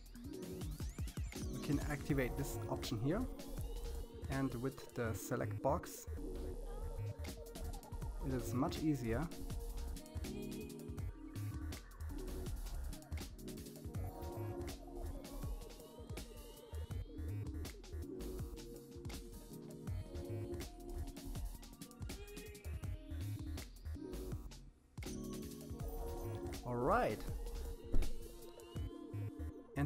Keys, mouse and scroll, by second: 0.1-1.0 scroll up 3, 1.0-2.7 drag, 3.5 g, 6.6 scroll down 2, 6.9 middle click, 7.8 scroll up 2, 7.9 middle click, 8.5 scroll up 1, 8.7 middle click, 9.5 click, 10.2 click, 11.3 alt+a, 11.5 click, 12.8 click, 14.5 g, 16.3 scroll down 4, 16.6 middle click, 17.9 middle click, 20.0-20.9 scroll down 2, 20.9 click, 21.3 middle click, 22.8 click, 23.3 middle click, 25.0-26.1 drag, 27.0 middle click, 27.9-28.5 scroll up 7, 28.7 click, 29.4-29.8 scroll up 10.